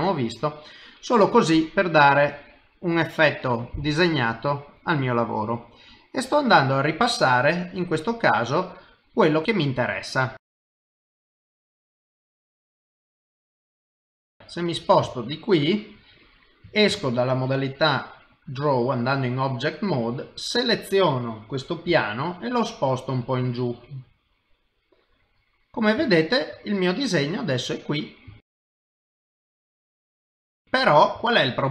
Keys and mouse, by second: 2.0 click, 4.3 click, 6.3 click, 9.6 click, 10.8 click, 11.3 click, 11.5 click, 12.3-14.3 click, 14.3 middle click, 15.1 shift+middle click, 15.7 middle click, 16.9 ctrl+Tab, 20.1 click, 20.5 middle click, 21.9 g, 24.9 middle click, 26.1 ctrl+middle click, 26.6 middle click, 28.3 shift+middle click, 29.0 middle click, 30.4 middle click, 31.2 shift+middle click.